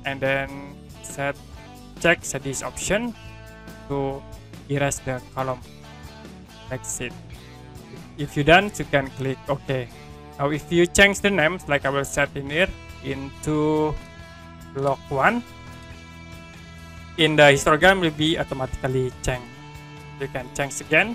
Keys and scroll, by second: 14.4 l, 14.6 o, 15.8 space, 16.0 1.